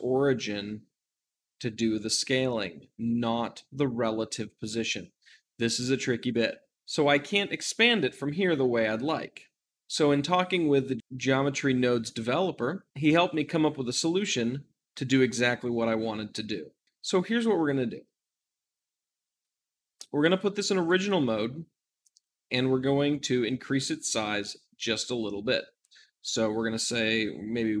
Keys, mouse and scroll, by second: 9.8-18.4 shift+middle drag, 18.3-27.8 drag.